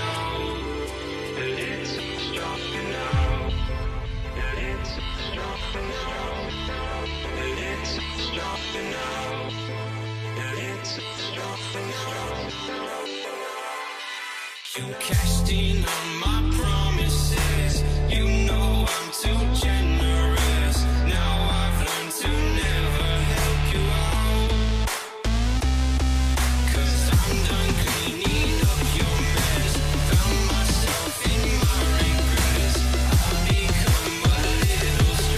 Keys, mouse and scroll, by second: 1.2 ctrl+t, 4.0 Return, 4.4 shift+Up, 5.1 Left, 5.3 Down, 5.5 right click, 6.4 double click, 7.2 ctrl+t, 12.0 Return, 12.6 alt+scroll up 1, 13.7 b, 18.5 alt+right click, 26.2 double click, 33.0 double click, 34.8 ctrl+z, 35.0 ctrl+z.